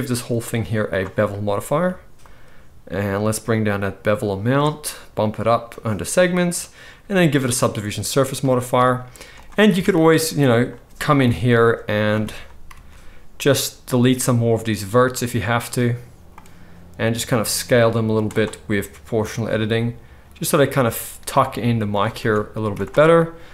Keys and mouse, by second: 0.2-9.4 drag, 9.8 Tab, 11.2 KP_1, 11.8 z, 12.6 x, 16.3-19.2 drag, 17.5 s, 19.7 s, 22.3 Tab, 22.6 z.